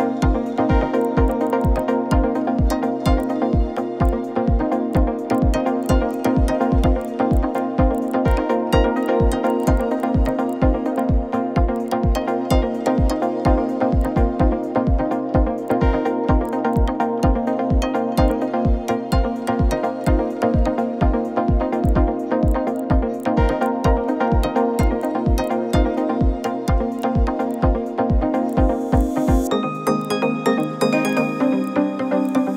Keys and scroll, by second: 11.7 ctrl+z, 11.7 ctrl+x, 20.6 ctrl+-, 20.7 ctrl+-, 20.8 ctrl+-, 21.0 ctrl+-.